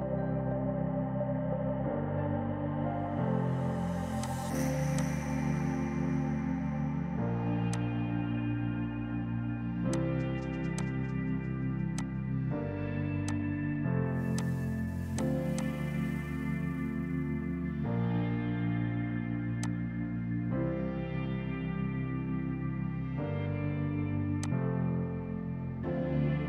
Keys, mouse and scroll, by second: 0.6 typing, 7.8 click, 19.7 click, 21.6 KP_Enter, 22.5-23.6 typing, 24.5 alt+click, 25.0 Delete, 25.7 space.